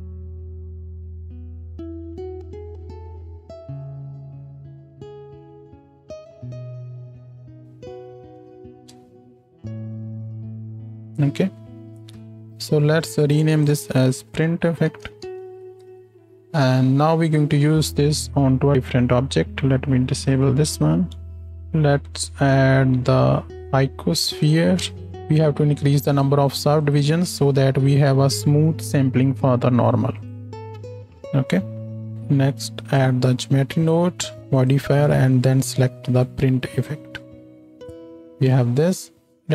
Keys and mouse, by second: 2.2 shift+Left, 8.8 space, 12.5 click, 16.2 f, 21.2 z, 21.5 shift+a, 32.1 click.